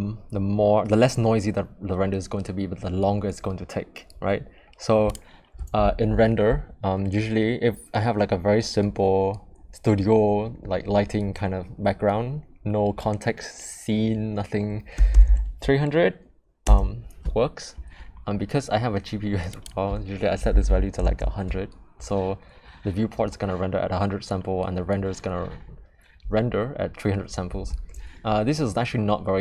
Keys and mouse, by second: 5.1-17.8 drag, 15.2 0, 19.5-22.2 drag, 20.6 0.